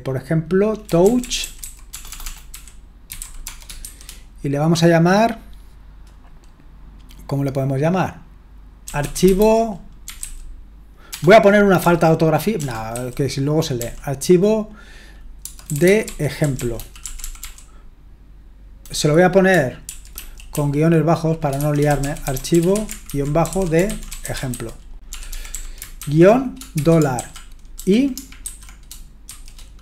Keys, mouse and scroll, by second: 0.6-3.8 typing, 8.6-13.8 typing, 15.4-17.9 typing, 19.9 ctrl+w, 20.2 ctrl+w, 20.5 ctrl+w, 21.3-29.8 typing.